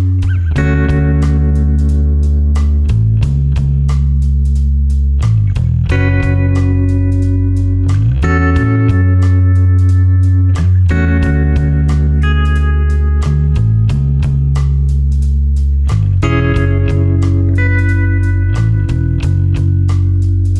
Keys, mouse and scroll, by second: 5.0 right click, 6.5 click, 17.9 space, 18.1 ctrl+click, 18.5 space, 19.6 click.